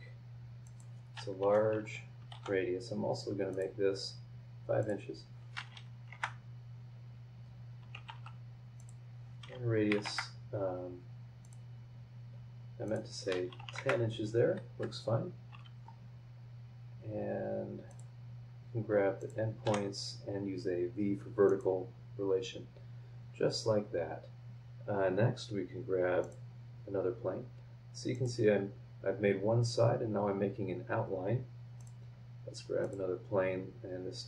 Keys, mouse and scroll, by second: 0.6 click, 1.4 Escape, 1.6 scroll up 2, 2.3 shift+v, 3.5 click, 4.8 drag, 5.9 KP_5, 6.1 KP_Enter, 8.1 shift+r, 8.8 click, 9.9 KP_1, 10.1 KP_Enter, 11.4 click, 12.8 click, 13.5 KP_1, 13.6 KP_0, 13.8 KP_Enter, 14.6 Escape, 17.9 click, 19.2 click, 19.6 v, 21.5 click, 22.7 scroll up 1, 26.2 click, 27.0 scroll down 1, 28.1 click, 31.8 click, 32.8 click, 33.6 scroll down 2.